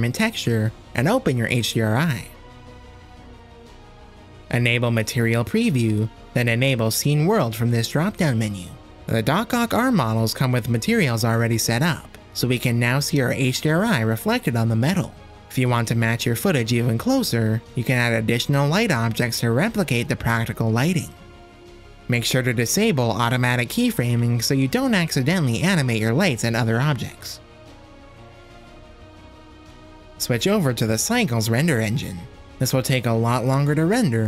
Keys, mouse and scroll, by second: 0.0 click, 1.5-2.2 drag, 5.0 z, 8.3-11.1 right drag, 11.3-12.2 drag, 12.2-13.5 middle drag, 14.2 KP_0, 15.3 z, 16.6-17.2 middle drag, 17.9 shift+a, 19.6 middle click, 19.9 g, 20.6 middle click, 21.2-21.7 middle drag, 21.2 g, 21.8 r, 25.7 click, 26.6 click, 27.2 click, 28.3 click, 28.8-29.1 drag, 29.2 middle click, 29.4-31.4 typing, 29.7 shift+middle click, 34.0 click.